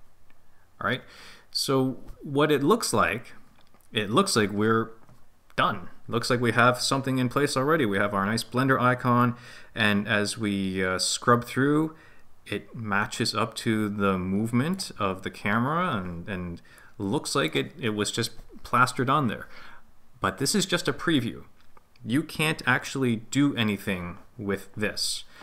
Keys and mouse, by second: 9.4-14.8 drag, 16.9-17.6 drag.